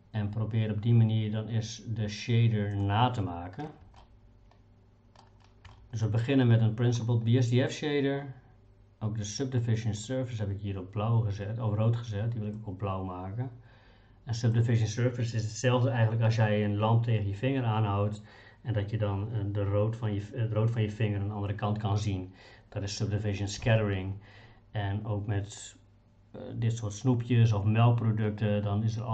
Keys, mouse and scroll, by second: 4.0-5.2 shift+middle drag, 5.7 shift+middle click, 10.0 click.